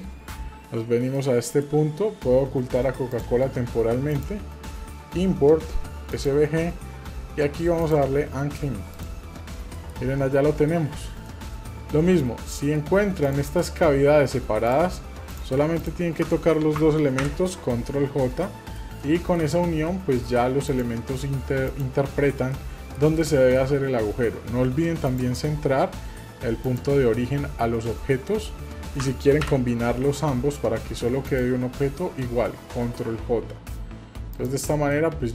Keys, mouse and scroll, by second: 0.8-1.1 scroll down 2, 1.1 middle click, 3.1 click, 4.1-6.4 drag, 9.8 middle click, 10.1 scroll up 2, 11.1 scroll up 2, 11.3-11.7 shift+middle drag, 11.8 scroll up 2, 12.1-12.5 scroll down 2, 12.6 shift+middle click, 13.2 click, 13.6-14.0 scroll up 2, 14.0 scroll down 1, 14.7-15.6 drag, 15.8-16.2 shift+drag, 17.2 ctrl+j, 18.2-19.4 middle drag, 19.5 scroll down 1, 19.9 middle click, 20.7 click, 21.7 shift+click, 22.5 middle click, 23.2 shift+middle click, 23.8 scroll down 1, 25.1-26.8 drag, 25.1 scroll down 1, 27.3-28.0 scroll up 1, 29.4 ctrl+j, 31.3-34.5 drag, 34.9-35.3 middle drag.